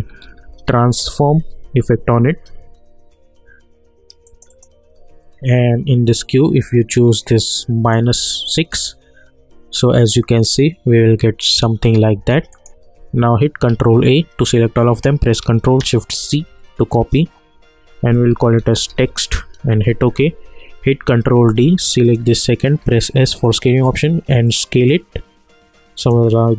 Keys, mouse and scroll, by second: 0.0-2.4 typing, 4.2 click, 6.9-8.7 drag, 8.7 space, 12.1 space, 12.5 click, 13.7 ctrl+a, 16.2 ctrl+shift+c, 18.3-19.5 typing, 19.7 Return, 21.0 ctrl+d, 22.0 click, 22.8 s, 23.4-26.5 drag.